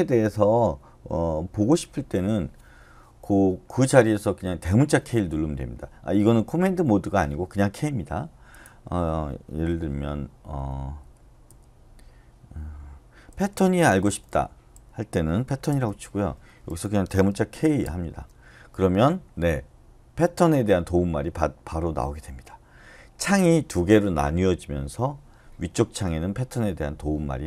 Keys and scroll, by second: 10.6-11.5 typing, 13.0-14.1 typing, 15.4-16.2 typing, 16.7 Left, 17.6-18.3 typing.